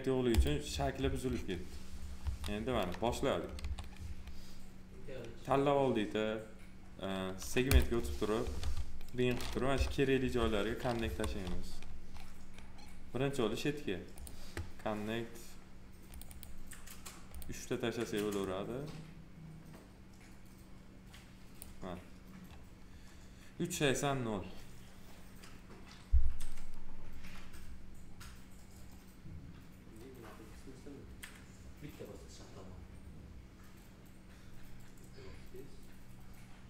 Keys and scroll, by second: 2.1 F4, 3.5 2, 8.5 alt+r, 9.7 p.